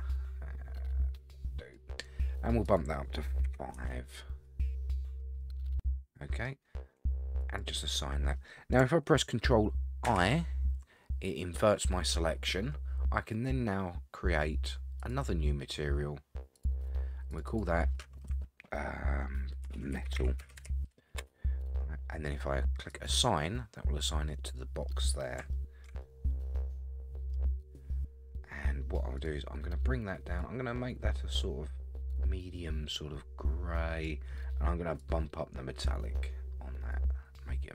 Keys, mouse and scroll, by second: 2.6-4.0 drag, 4.7-5.4 scroll down 8, 5.4-6.4 middle drag, 7.4 click, 10.0 ctrl+i, 11.7-13.1 scroll up 7, 15.0 click, 16.5 click, 17.3 click, 17.5-21.9 drag, 22.9 click, 23.7-24.0 scroll down 3, 24.0 middle click, 25.1-25.5 scroll down 2, 25.5 shift+middle click, 26.0-27.3 middle drag, 29.2 click, 35.0-37.0 drag, 37.2-37.7 scroll down 1.